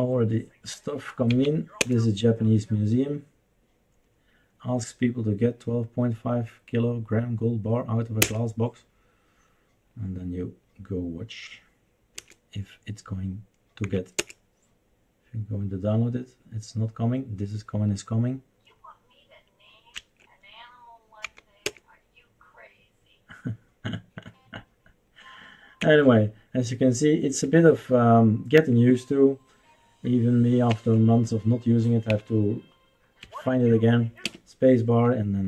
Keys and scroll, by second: 1.5 Down, 1.8 Return, 8.2 Return, 12.1 Return, 13.8 Down, 14.1 Return, 20.0 Escape, 21.3 Down, 21.6 Return, 25.8 Escape, 27.5 Escape, 30.7 Escape, 32.3 Up, 33.2 Escape, 34.2 space.